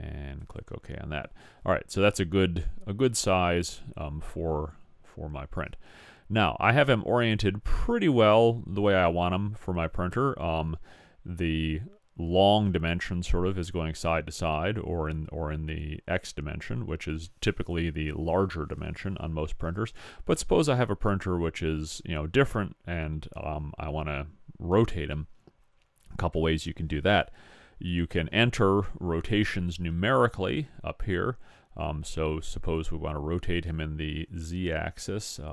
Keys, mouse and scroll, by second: 32.8-34.7 middle drag.